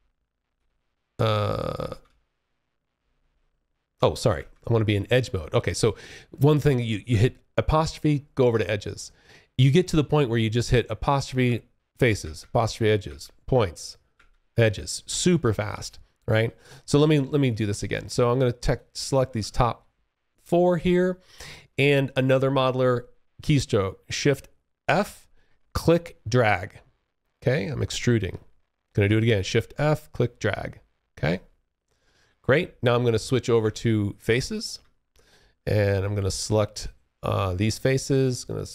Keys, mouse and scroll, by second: 0.9 space, 1.0 1, 6.2-7.6 `, 10.3 `, 11.3 `, 12.2 `, 13.2 `, 15.4 space, 15.5 3, 16.6 click, 18.3 space, 18.4 1, 23.9 shift+f, 24.9 click, 28.7 shift+f, 29.0 click, 32.7-33.8 `, 34.8 alt+click, 35.8 click.